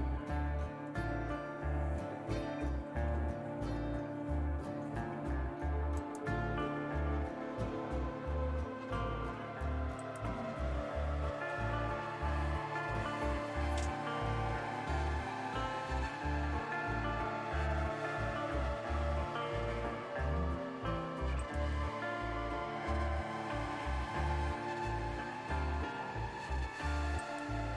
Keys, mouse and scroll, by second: 3.6 super+q, 4.2 super+q.